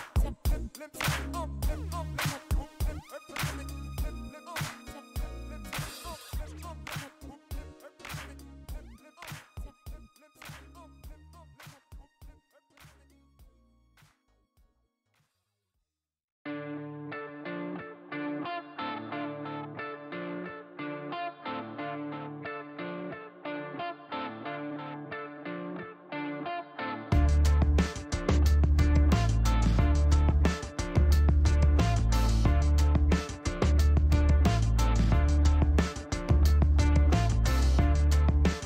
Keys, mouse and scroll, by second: 0.3 click, 0.6 space, 4.7 click, 9.0 click, 11.9 click, 13.3-14.3 typing, 14.8 Return, 18.0 click, 19.5 click, 21.8 click, 23.0 KP_0, 23.3 ,, 23.4 KP_5, 25.7 click, 28.5 ctrl+s, 36.2 alt+Tab, 37.0 alt+Tab, 38.5 click.